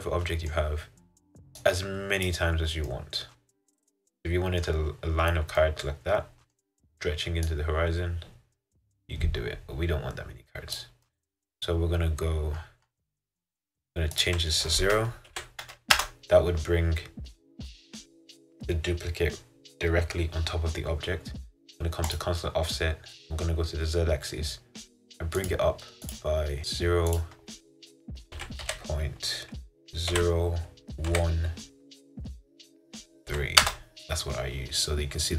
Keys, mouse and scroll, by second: 1.9 click, 2.7 scroll down 4, 3.0-5.0 middle drag, 5.0-5.7 scroll down 6, 5.7-7.9 middle drag, 7.9-10.6 drag, 11.2 middle click, 12.0-16.0 scroll up 13, 16.1-33.7 drag, 34.9-35.3 scroll up 4.